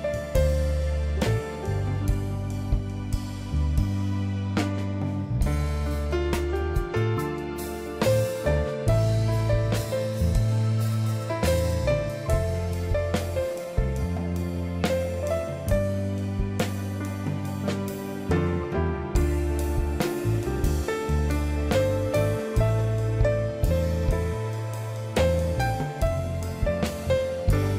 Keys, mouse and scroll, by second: 10.1 ctrl+i, 27.2 ctrl+i.